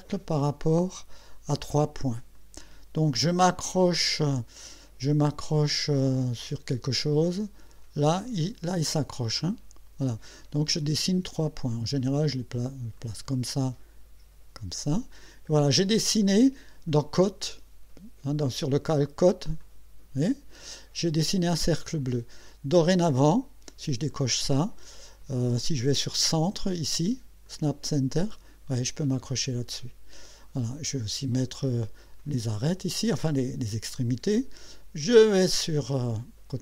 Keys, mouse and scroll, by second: 2.4 click, 6.4 click, 11.3 click, 13.0 click, 14.6 click, 19.6 click, 20.2 click, 24.1 click, 27.4 click, 32.2 click, 35.1 click.